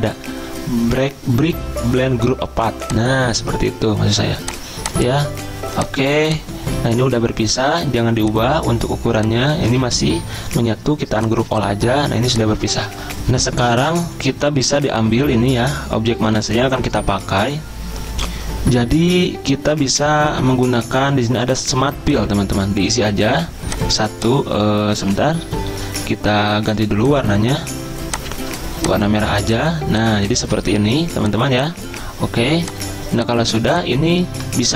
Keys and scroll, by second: 7.6 ctrl+z, 9.8 ctrl+z, 12.9 ctrl+z, 13.1 Delete, 13.1 alt+Tab, 25.4 ctrl+z, 25.7 ctrl+z, 34.3 ctrl+z.